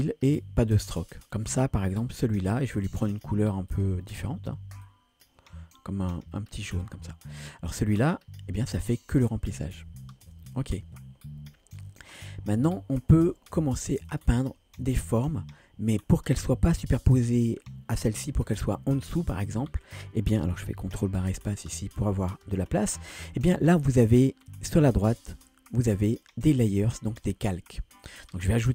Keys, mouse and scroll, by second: 0.3 click, 3.7 click, 7.9 click, 10.3 ctrl+z, 14.1 click, 15.1-15.9 scroll up 1, 21.2 ctrl+space, 24.5-25.3 drag, 26.7-28.7 drag.